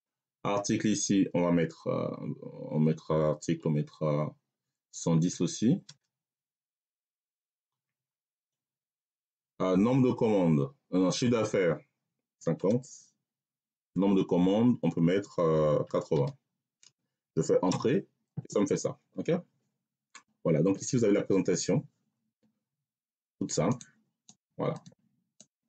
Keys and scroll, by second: 5.0 1, 5.7 0, 7.7 ., 11.9-13.8 typing, 15.7 8, 16.0 0, 17.6 Return.